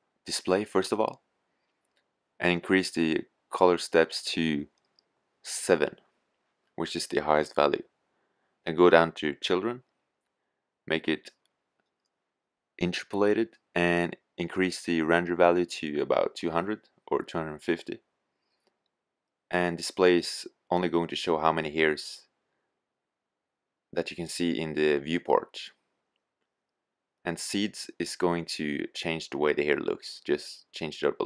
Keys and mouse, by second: 0.7-2.5 drag, 2.9-4.6 drag, 7.8-11.1 drag, 12.9-14.7 drag, 23.2-26.5 drag.